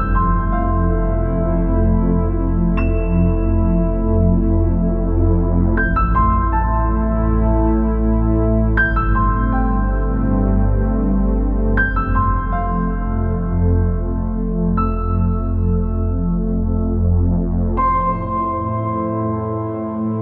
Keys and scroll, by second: 14.7 ctrl+c, 14.9 ctrl+v, 18.1 ctrl+c, 18.3 ctrl+v.